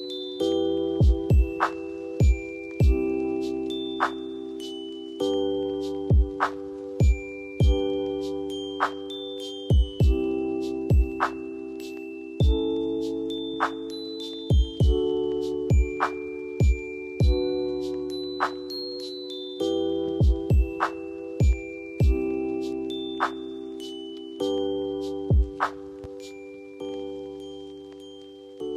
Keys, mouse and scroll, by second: 0.5 right click, 1.6 shift+click, 3.6 click, 6.3 scroll up 2, 7.3 ctrl+click, 8.5 F4, 9.5-20.9 drag, 20.9 Down, 22.1 click, 22.4 F2, 22.8-26.2 drag, 26.2-28.0 drag, 28.0 ctrl+g.